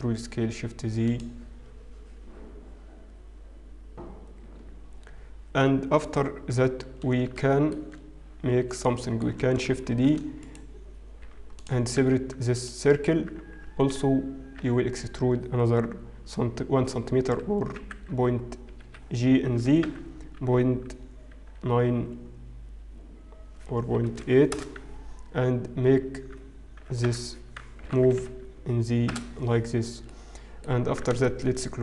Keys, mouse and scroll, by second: 7.4 shift+middle click, 8.6-9.0 scroll down 2, 9.0 shift+middle click, 10.2 shift+d, 11.4 p, 12.8 Tab, 12.8 click, 14.5 Tab, 14.5 a, 20.4 g, 26.0 Tab, 28.3 g.